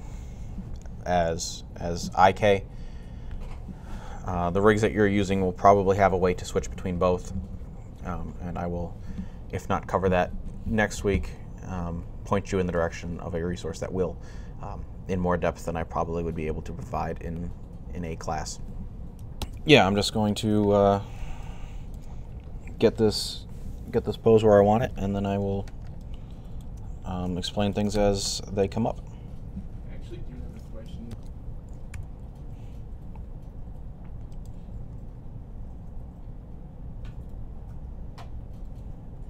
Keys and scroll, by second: 31.7 g, 34.7 r.